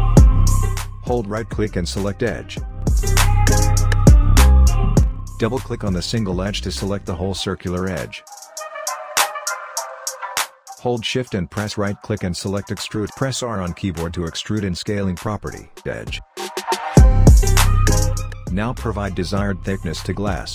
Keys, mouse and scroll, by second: 1.3 click, 11.4-15.3 shift+right drag, 15.3 r, 16.4-20.5 drag.